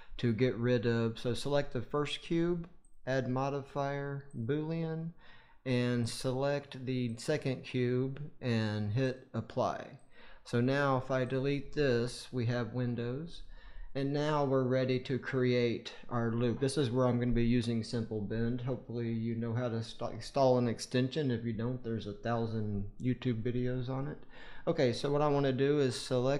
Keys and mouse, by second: 2.8-4.3 drag, 6.0-7.2 drag, 8.9-10.1 drag, 12.8 Delete, 14.3-16.0 drag, 15.8 middle click.